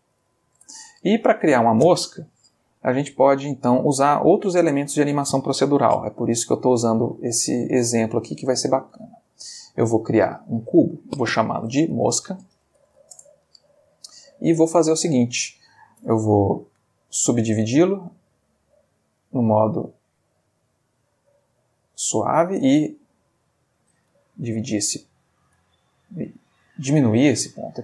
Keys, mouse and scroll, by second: 0.0-0.4 typing, 0.5 Return, 2.7-3.2 ctrl+middle drag, 3.3-3.9 ctrl+shift+middle drag, 7.7 shift+a, 9.6 click, 10.6 middle click, 11.6 F2, 12.5 shift+m, 12.8 shift+o, 13.0 shift+c, 13.1 shift+Return, 14.0-15.7 shift+middle drag, 16.0 Tab, 16.7 right click, 17.5 click, 19.2 click, 21.0-22.3 drag, 22.5 s, 23.8 click, 24.2-27.8 ctrl+middle drag.